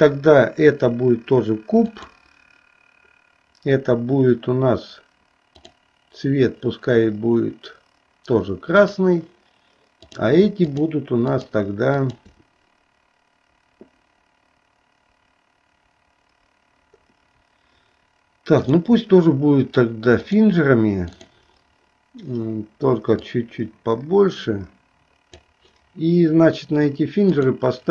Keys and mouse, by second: 2.0 click, 9.0 click, 10.0 click, 10.9 shift+click, 11.5 shift+click, 12.2 shift+click, 18.7-20.6 drag, 21.3 click, 23.3-25.4 drag, 27.4 click.